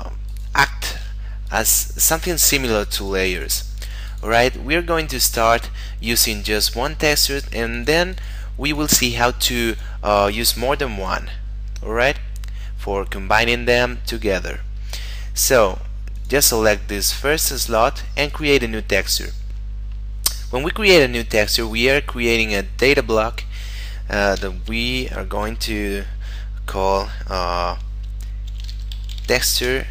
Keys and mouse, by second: 7.3 click, 16.2 click, 18.3 click, 21.6 click, 28.4-29.5 typing.